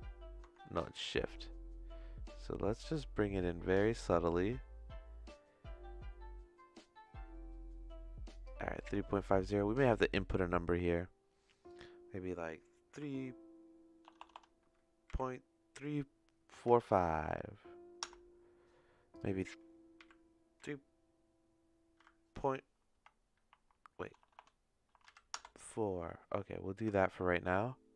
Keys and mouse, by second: 9.1-10.5 shift+middle drag, 11.6-26.1 drag, 14.2 BackSpace, 14.3 BackSpace, 24.2 BackSpace, 26.9-27.9 shift+middle drag.